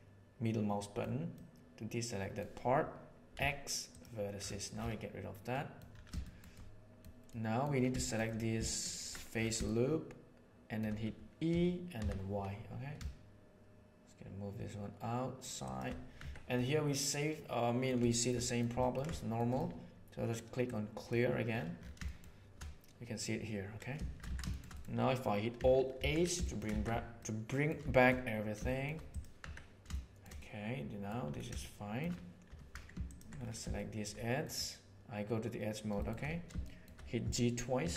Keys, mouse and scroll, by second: 1.3-2.3 middle drag, 3.2 x, 5.4 middle click, 6.1 shift+middle click, 7.2 middle click, 8.0 shift+middle click, 8.2 middle click, 9.6-10.7 shift+middle drag, 10.7 shift+click, 11.4 e, 16.1 Tab, 16.5-17.8 middle drag, 17.9 shift+middle drag, 18.4 middle click, 18.6 ctrl+middle drag, 19.1 shift+middle click, 20.6 click, 22.0 shift+middle click, 24.2 alt+shift+a, 24.6 middle click, 25.9 alt+h, 26.3 shift+middle drag, 26.7 alt+a, 27.1-27.5 middle drag, 27.8 shift+middle click, 28.6 shift+middle click, 29.0 middle click, 29.3 Tab, 29.8 shift+middle click, 30.4 middle click, 31.6 shift+middle click, 32.4 2, 33.7 shift+middle click, 34.3 middle click, 35.9 shift+middle click, 36.6 shift+middle click, 37.7 g.